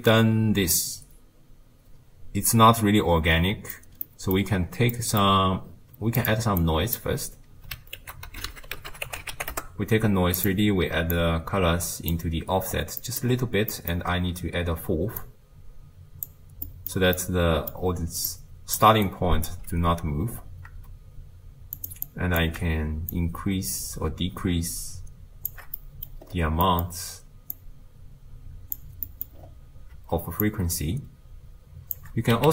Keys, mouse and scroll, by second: 6.2-9.7 drag, 9.7 ctrl+a, 12.2 click, 15.2-16.3 drag, 17.2-18.3 middle drag, 18.3 click, 18.8 d, 19.1 right click, 19.5 d, 21.8-32.5 drag.